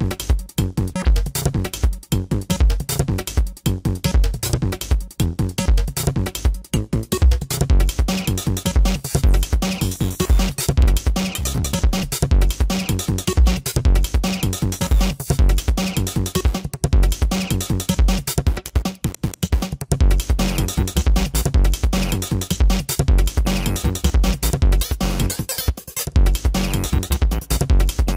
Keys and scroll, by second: 0.4 ctrl+alt+z, 1.0 space, 4.1 space, 6.0 ctrl+=, 6.6 ctrl+=, 6.8 space, 8.1 ], 8.7 ctrl+alt+z, 9.3 space, 11.9 ctrl+=, 12.2 space, 12.5 ctrl+=, 12.7 space, 13.0 ctrl+=, 13.7 space, 15.4 ctrl+alt+z, 16.0 space, 17.9 ctrl+alt+z, 18.7 ctrl+=, 19.3 space, 19.8 space, 22.7 space, 23.7 ctrl+alt+z, 25.9 space, 27.0 ctrl+alt+z.